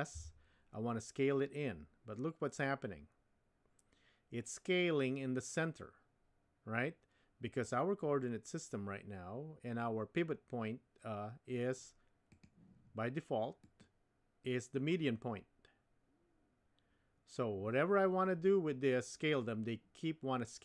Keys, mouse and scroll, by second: 13.8-17.5 drag.